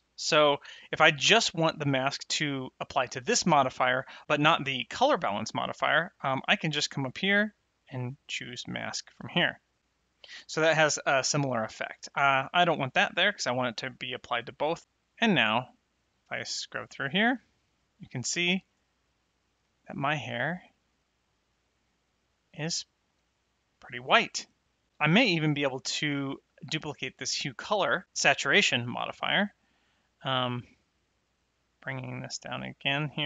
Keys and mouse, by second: 0.5 click, 6.3 click, 8.4 click, 12.5 click, 15.9 click, 19.6 middle click, 21.4 click, 28.0 click, 30.4 click, 32.1 click.